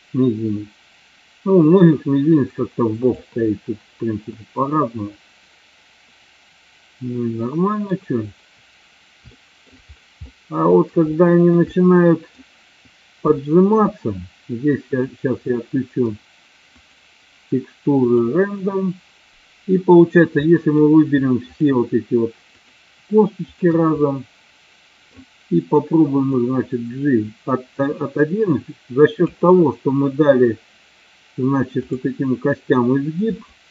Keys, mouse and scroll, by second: 4.4-8.0 middle drag, 9.4 shift+middle click, 10.2 middle click, 11.3 shift+middle click, 11.8 middle click, 13.6 shift+middle click, 15.4-16.2 middle drag, 16.9-18.6 drag, 20.5-20.8 middle drag, 21.6-22.2 shift+drag, 22.7-23.2 shift+drag, 23.6-24.2 shift+drag, 24.2-25.2 middle drag, 26.6-29.3 drag, 31.9 click, 33.5 shift+middle click.